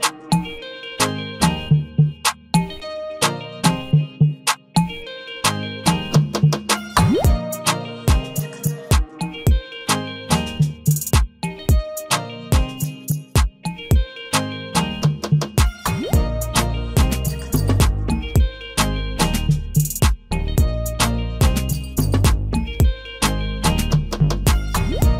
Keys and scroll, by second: 1.0 ctrl+d, 19.1 ctrl+t.